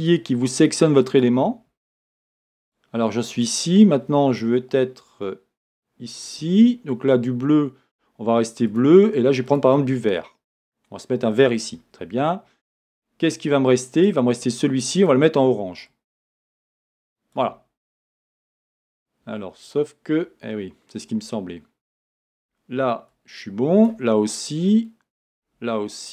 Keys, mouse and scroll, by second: 14.1 click, 21.5-26.1 drag.